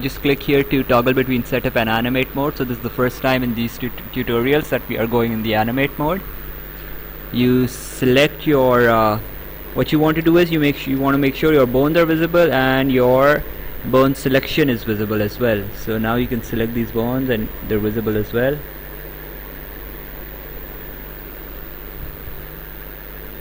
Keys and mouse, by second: 0.8 click, 1.8 click, 11.7 click, 14.2 click, 16.2 Escape, 18.4 Escape, 20.3 click, 22.3 click.